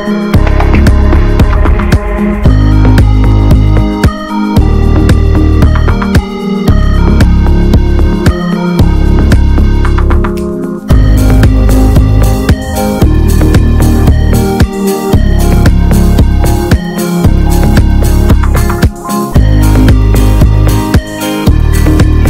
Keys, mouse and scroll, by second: 3.0-5.6 scroll up 1, 12.9 click, 13.8 ctrl+z, 17.1-22.1 right drag, 22.1 click.